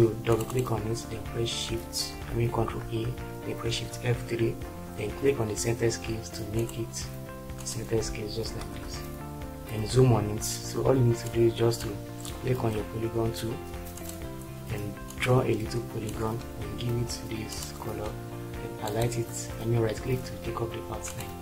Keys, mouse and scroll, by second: 2.5 ctrl+a, 3.6 shift+F3, 8.5 ctrl+space.